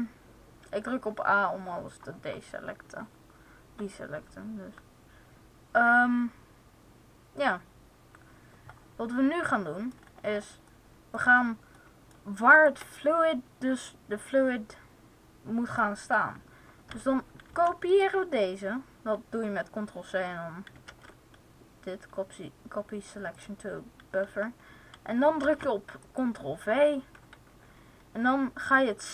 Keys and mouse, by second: 9.4 middle click, 10.9 middle click, 12.5-14.5 right drag, 17.4 ctrl+c, 20.8 ctrl+c, 23.3 click, 25.3 ctrl+v.